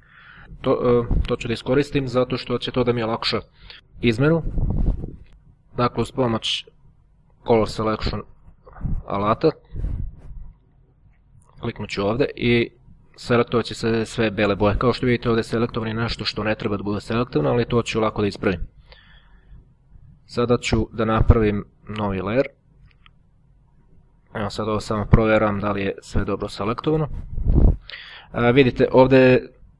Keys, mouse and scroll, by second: 2.9-4.0 drag, 4.7 click, 5.8 click, 7.4 click, 9.5 click, 11.4 click, 15.6-16.2 ctrl+scroll up 2, 17.2-17.8 ctrl+scroll down 2, 22.1-22.7 ctrl+scroll up 2, 23.2 ctrl+click, 24.0-25.3 ctrl+scroll up 1, 25.3 scroll up 1, 26.8-27.9 ctrl+scroll up 4, 27.9-29.7 ctrl+scroll up 1.